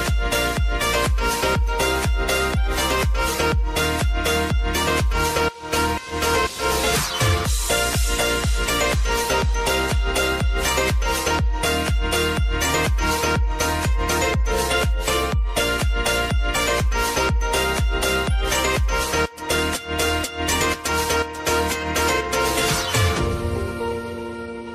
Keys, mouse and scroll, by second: 1.8 p, 3.5 [, 4.0-8.8 drag, 9.0-9.6 typing, 10.6-13.3 drag, 13.8 F9, 14.6 click, 15.7 =, 16.4-18.4 drag, 18.9 r, 19.8 click, 20.3-21.2 typing, 22.4 click, 22.6 typing, 23.7-24.7 drag.